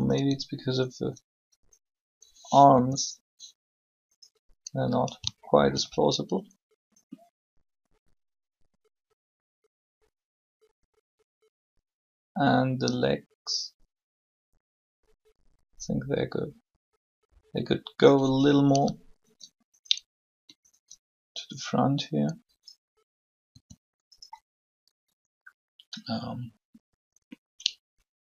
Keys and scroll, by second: 2.7 r, 23.4 r.